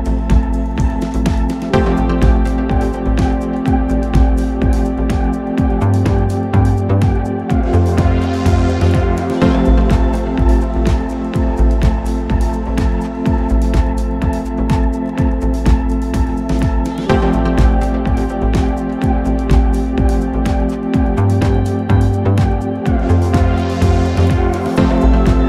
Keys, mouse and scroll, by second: 0.0-1.6 drag, 4.7-6.5 drag, 10.0-11.6 drag, 11.7 click, 23.5-25.3 drag.